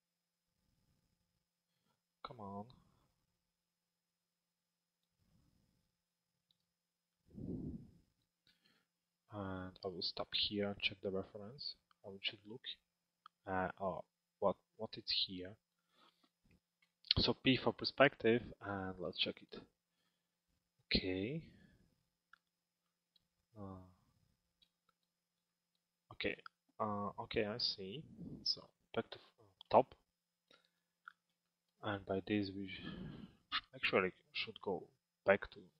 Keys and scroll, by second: 16.4 p, 28.2 f.